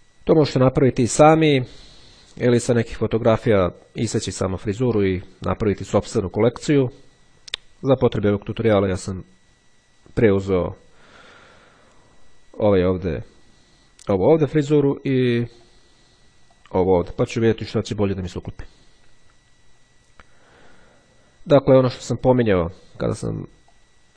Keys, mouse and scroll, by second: 10.2-10.7 scroll down 1, 11.3 click, 15.7 click, 16.7 click, 22.2 click, 23.8 click.